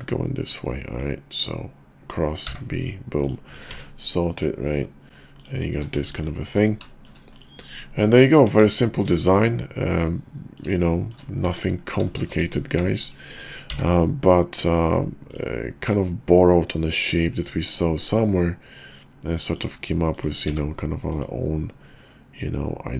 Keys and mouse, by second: 0.7-2.9 middle drag, 5.4 click, 5.7 q, 7.0 shift+middle click, 7.3 click, 7.9 middle click, 8.4 KP_5, 9.1-10.6 middle drag, 10.9 shift+click, 11.5 `, 12.1 shift+click, 12.4 KP_5, 12.9 shift+click, 13.7 d, 15.2 click, 15.9-18.1 drag.